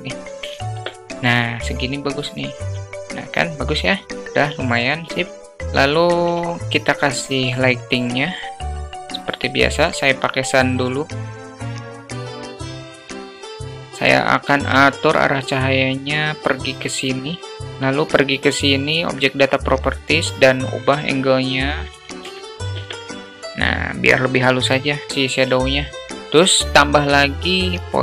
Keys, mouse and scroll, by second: 3.1 q, 3.8 click, 6.6 shift+a, 10.9 click, 11.8 alt+middle click, 12.6 click, 13.1 click, 14.7 shift+t, 18.9 click, 21.4-23.2 drag, 26.3 shift+a.